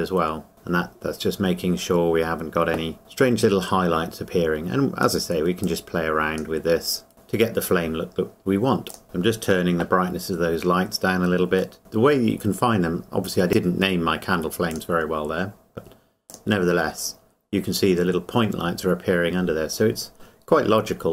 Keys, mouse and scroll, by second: 0.9 scroll down 1, 3.2 click, 5.9 click, 9.0 KP_Enter, 11.8 middle click, 12.0-12.9 scroll down 1, 15.3-16.3 scroll down 1, 16.3 click, 17.3 scroll down 1.